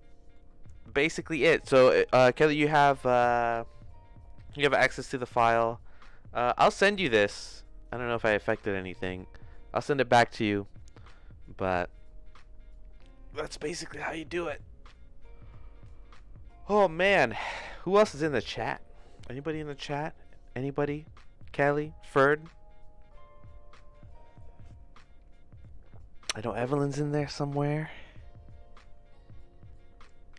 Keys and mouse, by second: 0.0 middle click.